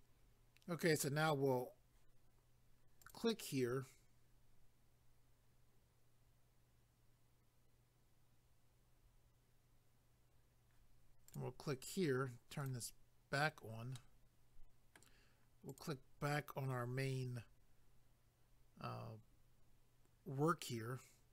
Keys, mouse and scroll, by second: 3.0 click, 3.1 click, 11.3 click, 11.4 click, 12.6 click, 12.7 click, 13.9 middle click, 15.7 click, 15.8 click.